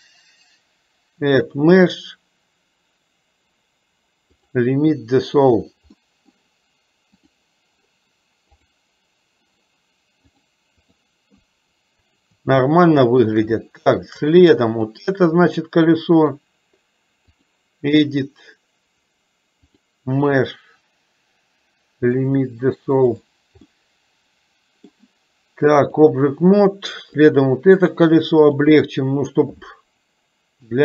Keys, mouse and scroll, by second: 1.6-4.6 drag, 6.1 middle click, 10.4 click, 12.8 shift+middle click, 13.8 shift+middle click, 14.9 click, 16.2-17.6 drag, 19.8-22.5 drag, 23.8-25.0 middle drag, 25.9 click, 27.2 click, 28.5-30.8 drag.